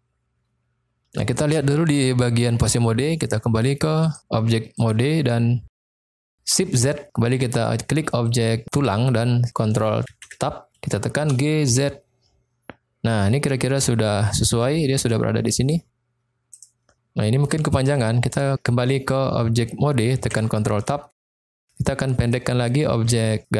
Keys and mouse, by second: 4.0-5.0 drag, 5.8 click, 6.8 shift+z, 10.1 ctrl+Tab, 11.2 g, 11.6 z, 16.6 click, 18.0 click, 20.2 ctrl+Tab, 21.2 shift+middle drag, 22.2 click.